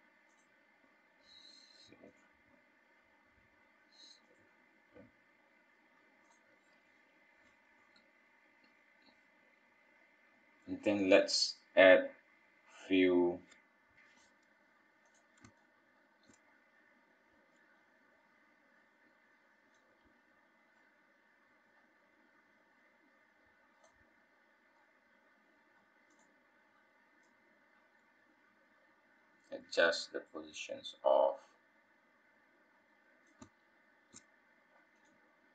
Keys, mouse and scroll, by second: 28.1 click, 28.1-28.8 scroll down 3, 28.9 KP_1, 29.6 click, 30.2 click, 30.6-32.4 scroll down 7, 32.4 scroll up 1, 32.6-33.3 scroll down 1, 33.3 middle click, 34.2-35.0 scroll down 1, 35.0 click.